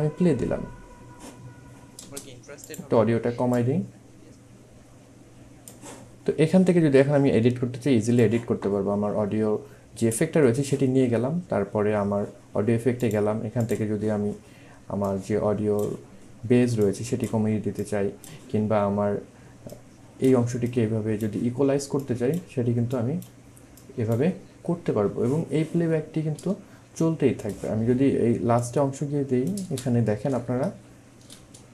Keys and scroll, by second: 2.0 space, 29.6 space.